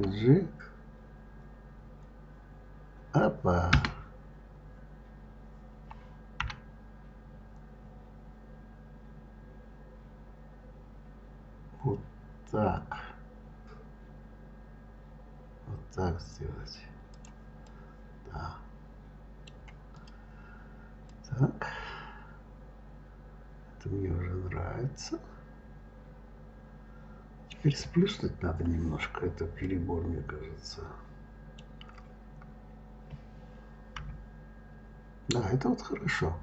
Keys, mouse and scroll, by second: 2.1 g, 4.0-4.5 scroll up 3, 4.5 scroll down 5, 6.2 g, 17.5-19.8 middle drag, 19.8 click, 20.9-23.9 middle drag, 28.1-28.7 scroll up 1, 28.7-29.4 scroll down 2, 29.4-32.4 middle drag, 33.8 KP_3.